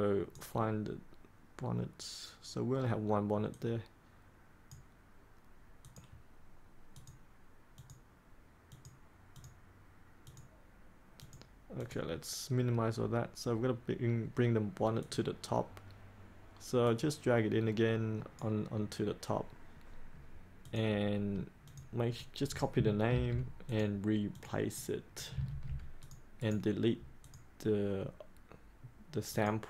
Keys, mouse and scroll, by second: 22.3 click, 23.1 ctrl+c, 23.6 click, 25.5 ctrl+v, 25.9 click, 26.3 right click, 27.2-29.6 drag.